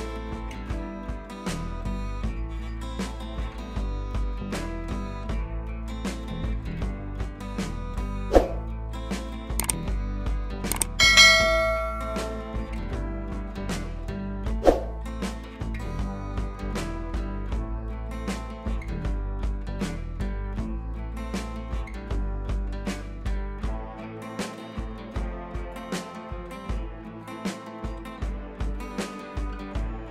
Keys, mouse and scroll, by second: 2.6 scroll down 2, 3.4 scroll down 1, 3.9 scroll up 1, 5.1-5.8 drag, 11.8 click, 13.2 ctrl+t, 13.8-16.0 drag, 17.0-17.9 click, 19.2-22.6 click, 28.8 ctrl+t, 29.4-30.1 drag.